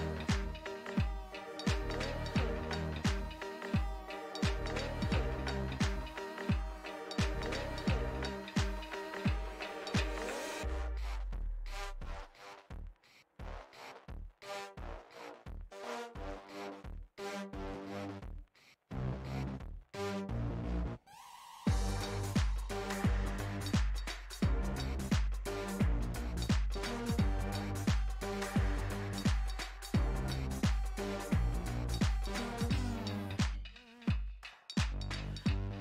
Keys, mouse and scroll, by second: 0.8-5.8 middle drag, 5.8-8.6 drag, 8.7-10.2 middle drag, 10.2-12.6 drag, 12.6-17.5 middle drag, 17.5 space, 18.0 f, 19.0 f, 19.8-22.6 drag, 22.6 f, 23.3-26.7 drag, 26.7 shift+c, 27.2 f, 28.6-31.4 ctrl+drag, 31.4 p, 32.5-35.8 drag.